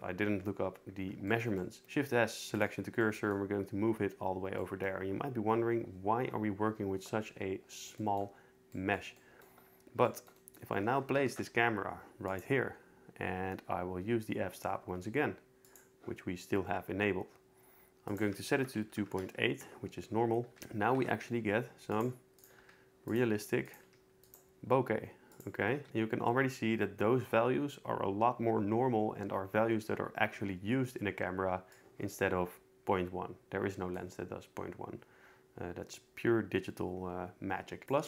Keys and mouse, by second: 1.8 shift+s, 11.1 ctrl+alt+KP_0, 12.3 click, 16.0 click, 18.1-19.1 drag, 20.6 ctrl+z, 20.6 g, 21.0 shift+a, 22.7 g, 23.1 click, 23.3 r, 23.7 click, 23.9 g, 25.3 click, 25.7 r, 31.7 click, 34.0-35.5 drag, 35.5 middle click, 36.1-38.0 drag.